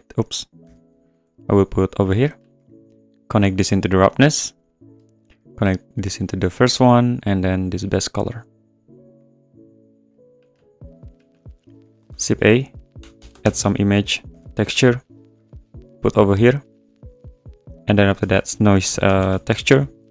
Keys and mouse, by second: 0.1 click, 0.6 x, 1.1 click, 2.6 click, 3.5 click, 5.7 click, 7.3 click, 9.2 click, 11.1 click, 11.8 click, 12.1 shift+a, 17.0 click, 18.0 shift+click, 18.2 shift+a.